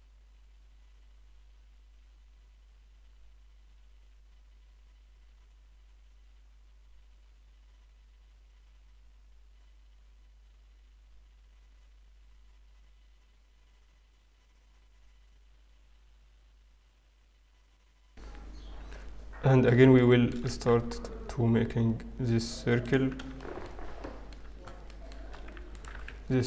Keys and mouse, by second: 0.2-1.2 middle drag, 1.2-2.5 drag, 3.0-9.4 drag, 11.8-14.4 drag, 15.0 x, 16.8-18.4 drag, 19.8 middle click, 20.4 w, 24.4 middle click, 25.6-26.4 right drag, 25.8 w.